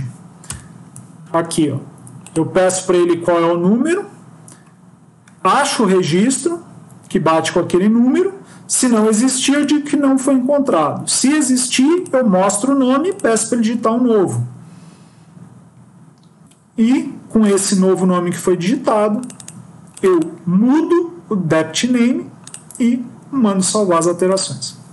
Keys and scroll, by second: 0.5 Delete, 1.1 ctrl+s.